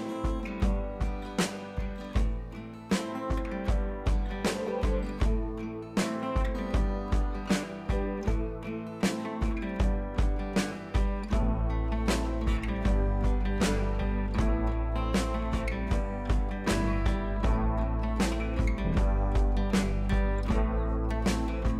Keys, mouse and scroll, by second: 0.3 click, 1.1 u, 1.7-2.0 drag, 4.2-4.6 scroll down 1, 5.6-10.3 alt+drag, 10.8 scroll down 1, 14.0 click, 17.3 click.